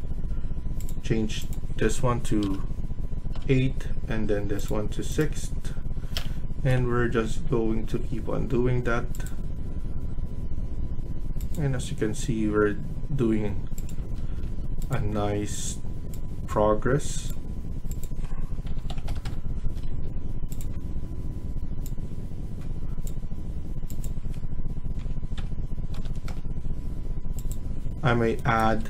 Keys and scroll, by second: 2.3 BackSpace, 3.2 BackSpace, 6.0 BackSpace, 6.6 BackSpace, 13.9 Escape, 14.1 Escape, 14.3 Escape, 18.3-19.5 typing, 19.6 Escape, 19.7 Escape, 24.9-25.9 typing, 26.2 Return, 28.6 Escape.